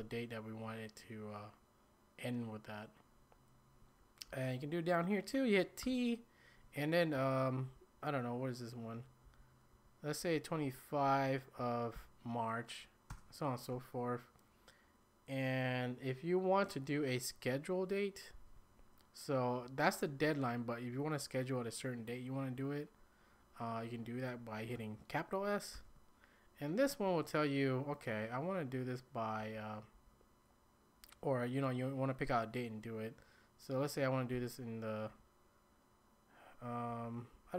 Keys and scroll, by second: 4.3 Down, 5.8 t, 7.1 Right, 7.7 Left, 9.3 Up, 9.7 Right, 10.2 Up, 10.6 Up, 11.1 Right, 11.2 Right, 11.9 Up, 11.9 typing, 13.1 Return, 25.7 s, 29.4 Right, 29.9 Left, 34.3 Up, 35.1 Right, 36.9 Down, 37.3 Down.